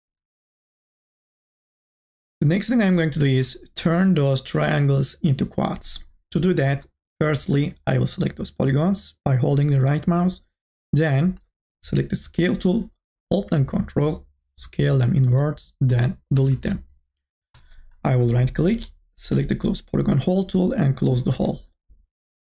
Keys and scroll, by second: 16.6 Delete.